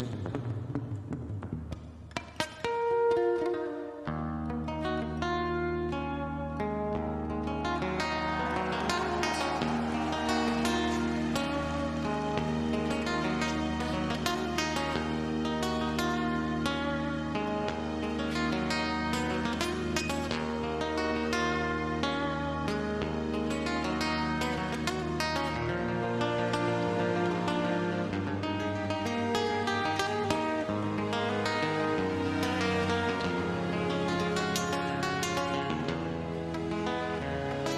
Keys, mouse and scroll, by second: 0.4-0.9 scroll up 1, 1.6-4.3 drag, 4.3-4.6 scroll down 1, 4.6-5.2 scroll up 1, 5.2 middle click, 7.8-9.9 typing, 11.6 typing, 11.8 click, 14.0 d, 15.3 KP_2, 16.9 KP_5, 18.7-19.1 scroll down 1, 20.2 click, 20.5 scroll down 1, 21.1 scroll up 1, 22.7 typing, 24.0-24.8 typing, 26.0-27.2 drag, 29.7 scroll down 1, 31.0 middle click, 31.4 scroll down 1, 34.8-35.2 scroll up 1, 35.3 middle click.